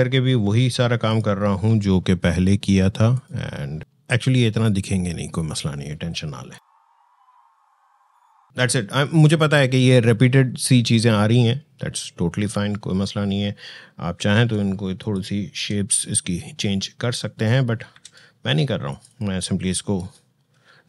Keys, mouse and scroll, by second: 5.1 click, 6.3-7.9 alt+drag, 8.4 space, 14.4 shift+space, 14.8 shift+click, 17.7 ctrl+e, 18.7 click.